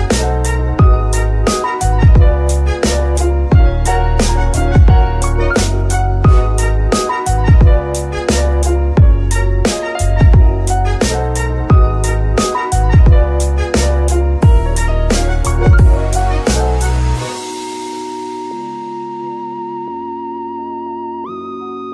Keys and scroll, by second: 0.8 Tab, 1.3 shift+s, 2.4 KP_3, 5.3 g, 5.4 y, 6.0 Escape, 8.4 g.